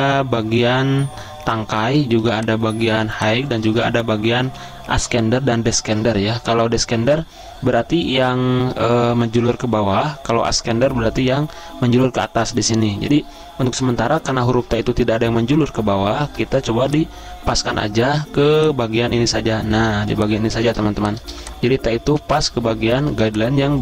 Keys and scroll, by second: 2.2 z, 3.8 v, 4.4 z, 6.4 v, 20.0 z, 21.1-21.9 typing, 23.1 z.